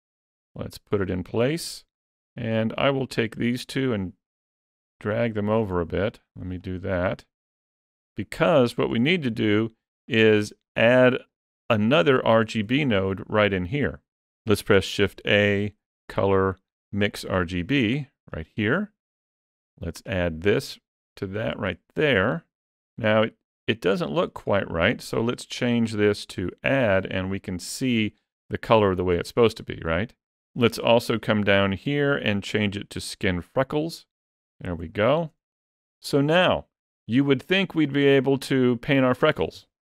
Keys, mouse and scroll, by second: 0.1 click, 2.0 click, 3.4 click, 4.7 click, 5.9 click, 6.4 click, 7.8-8.1 scroll up 3, 8.1 shift+middle click, 9.3 click, 9.8 shift+click, 10.3 click, 11.1-11.7 shift+scroll up 1, 11.7 shift+middle click, 12.3 scroll up 1, 12.6 shift+middle click, 14.9 shift+a, 19.9 click, 24.9 click, 31.1 click, 34.5 scroll up 3, 34.7 shift+middle click, 35.2-35.6 scroll up 3.